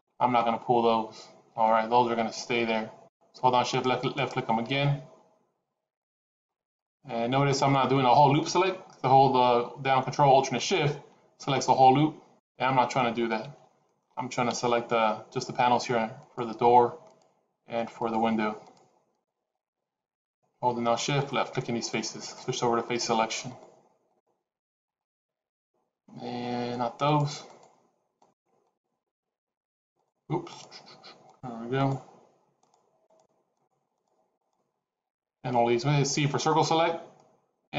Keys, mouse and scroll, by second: 3.6 shift+click, 4.0 shift+click, 6.6 shift+click, 7.5 shift+click, 10.4 alt+shift+click, 11.3 scroll down 1, 11.4 middle click, 13.4 ctrl+z, 13.8 middle click, 14.3 KP_1, 16.1 shift+click, 16.9 shift+click, 18.5 shift+click, 19.1 shift+click, 19.4 shift+click, 20.0 shift+click, 20.9 shift+click, 21.7 shift+click, 22.1 shift+click, 22.7 shift+click, 23.5 shift+click, 24.1 shift+click, 24.9 shift+click, 27.5 shift+click, 28.2 shift+click, 28.5 shift+click, 28.9 shift+click, 29.9 shift+click, 30.5 shift+click, 31.8 shift+click, 32.4 shift+click, 33.1 shift+click, 33.4 shift+click, 34.2 shift+click, 34.4 shift+click, 36.0 c.